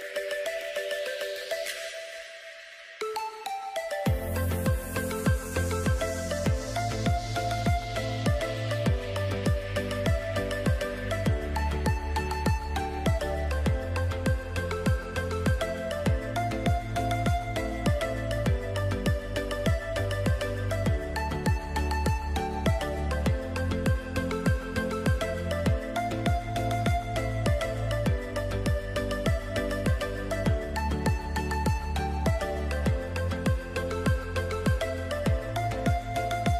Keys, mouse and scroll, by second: 2.1 click, 5.2 click, 9.1 click, 12.0 click, 22.1 shift+click, 26.9 click, 29.3 click, 33.5 click, 35.6 click.